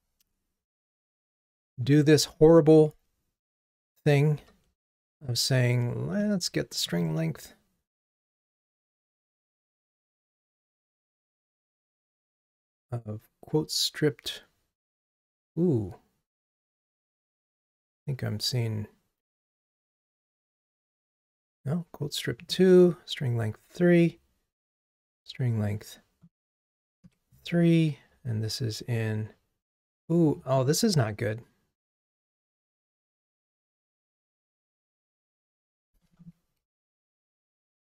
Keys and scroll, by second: 4.5 super+d, 10.7 super+c, 34.8 super+c, 36.7 super+v.